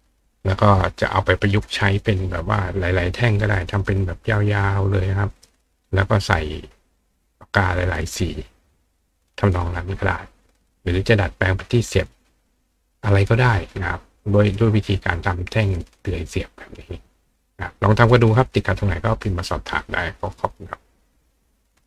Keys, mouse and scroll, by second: 21.8 click.